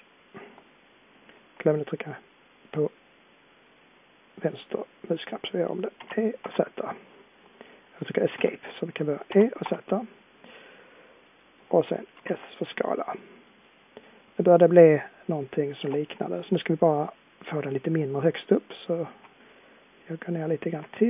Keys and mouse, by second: 9.3 e, 12.1 s, 19.6-21.0 middle drag.